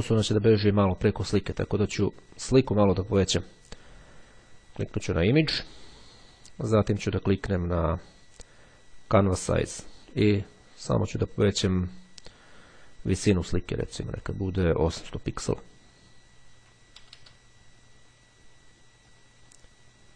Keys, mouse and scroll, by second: 4.6 click, 9.4 click, 13.6 click, 14.8 KP_8, 15.0 KP_0, 18.7-19.9 drag.